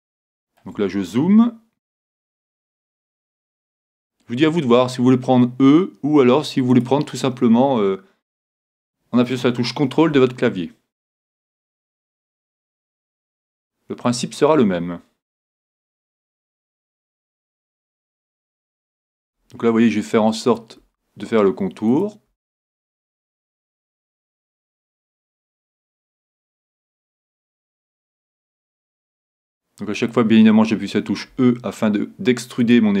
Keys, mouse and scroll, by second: 0.1-2.1 middle drag, 2.5 e, 6.8-8.6 drag, 8.5-10.7 middle drag, 8.7 click, 11.5-16.0 drag, 15.5 e, 17.7-19.7 drag, 19.3 e, 20.6-32.0 drag, 20.9 e, 22.5 e, 24.0 e, 25.3 e, 27.1 e, 28.7 e, 31.3 e, 32.7-33.0 drag.